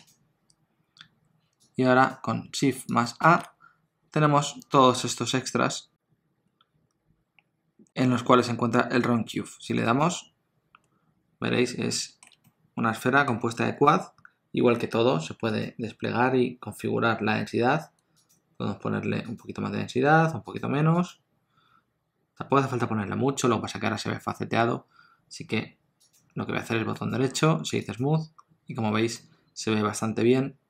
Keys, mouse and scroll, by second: 2.9 click, 3.3 shift+a, 11.9 middle click, 12.5 ctrl+middle click, 18.2 click, 19.3 click, 20.6 click, 21.0 click, 26.1 click, 26.9 right click, 29.2 middle click.